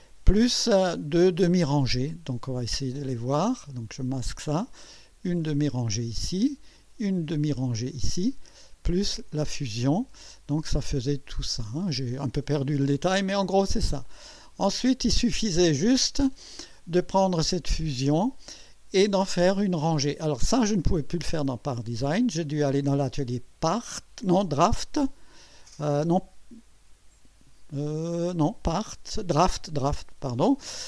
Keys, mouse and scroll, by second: 4.1 space, 5.0 click, 5.3 space, 6.7 click, 7.2 space, 8.9 click, 9.2 space, 10.6 click, 11.0 space, 11.4 click, 11.7 space, 12.9 scroll up 2, 13.3 scroll down 2, 14.0-14.8 drag.